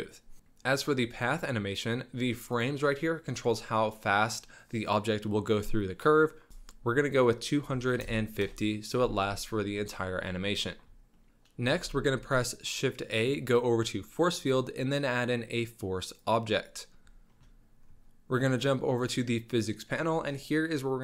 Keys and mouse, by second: 1.1 click, 2.6 click, 7.1-8.5 drag, 11.1-11.6 shift+middle drag, 11.7 shift+a, 17.8 middle click, 19.0 click.